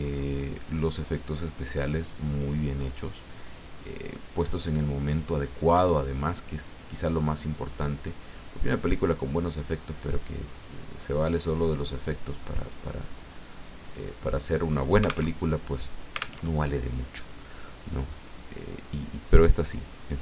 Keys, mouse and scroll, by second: 2.9-5.8 drag, 8.3-10.0 drag, 11.6-12.9 drag, 13.8-15.3 drag, 15.3 alt+Tab, 16.4 alt+Tab, 18.1-19.8 drag, 20.0-20.2 drag.